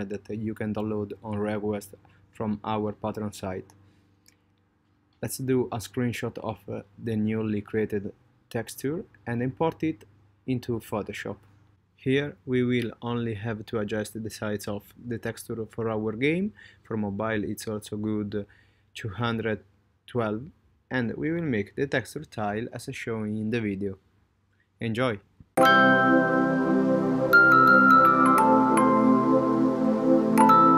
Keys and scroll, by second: 5.0 super+z.